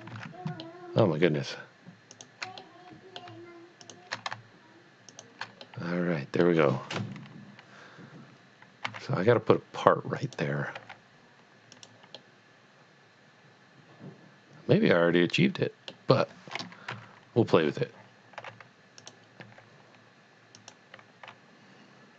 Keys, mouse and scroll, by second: 0.1 ctrl+z, 0.7 middle click, 2.1 shift+click, 2.6 shift+middle click, 3.9 shift+click, 5.1 shift+double click, 6.1 middle click, 7.0 KP_1, 8.8 e, 10.3 click, 10.7 g, 11.7 click, 12.2 middle click, 12.5 middle click, 16.9 KP_1, 18.4 r, 19.0 click, 19.4 g, 20.5 click.